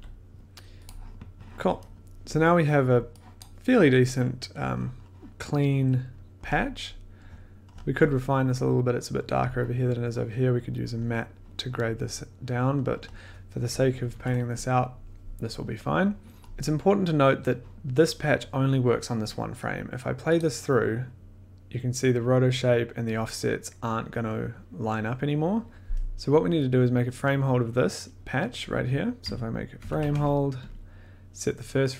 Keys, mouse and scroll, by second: 0.8 click, 2.0 click, 2.0-2.6 scroll, 3.4 click, 3.9 scroll, 6.4 scroll, 7.2-8.4 scroll, 12.8-13.3 scroll, 14.0 ctrl+s, 16.4 scroll, 20.3 click, 22.1-25.5 drag, 28.9 click, 29.2 Tab, 29.7-31.3 typing, 30.6 click.